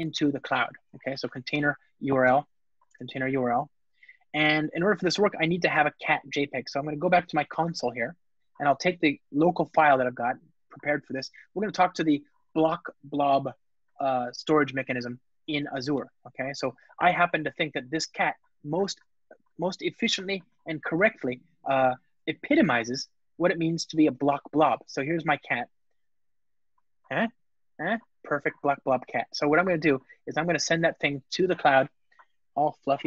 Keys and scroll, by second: 2.1 Return, 7.2 shift+super+a, 9.4 alt+F12, 24.0 shift+super+o, 29.4 ctrl+Tab.